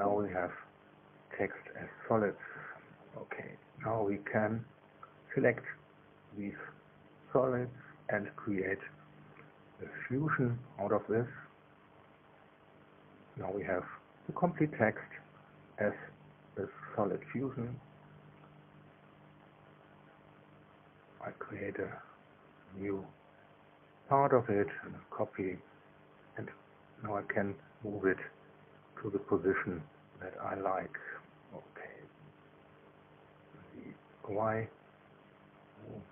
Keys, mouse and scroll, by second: 0.4-1.3 scroll up 2, 1.3 click, 2.5 click, 4.2 click, 6.7 middle click, 7.8 shift+click, 10.3 click, 14.6 click, 15.9 click, 17.4-22.1 drag, 23.6 click, 24.5-26.2 middle drag, 27.2 KP_2, 29.7-30.8 shift+middle drag, 30.8-32.3 shift+drag, 33.0-33.5 scroll up 1, 33.6 scroll up 1, 34.4 click, 35.0-35.4 scroll up 1, 35.6 scroll up 1.